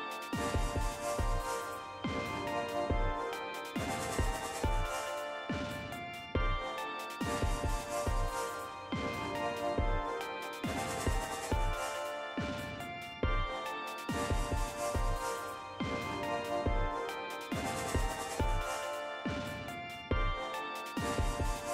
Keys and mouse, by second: 5.4 click, 8.6 click, 10.6-11.6 drag, 12.7 click, 14.4-18.6 drag.